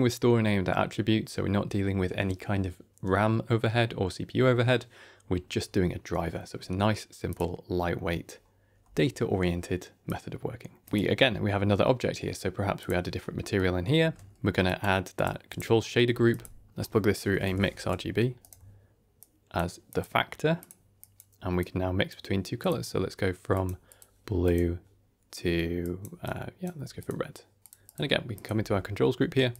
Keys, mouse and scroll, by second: 5.3-6.3 scroll up 1, 6.3-7.2 scroll down 3, 7.2 click, 8.2-8.7 scroll down 2, 8.7 Tab, 10.0 click, 10.8 shift+middle click, 10.8 scroll down 1, 12.7 click, 13.1 middle click, 13.9 shift+a, 15.7 middle click, 16.0 g, 16.7-18.3 drag, 19.1 click, 19.8 click, 20.9 click, 21.5 click, 24.3 click, 26.9 click, 27.8 click, 28.2 click, 28.4 Tab, 29.4 shift+click.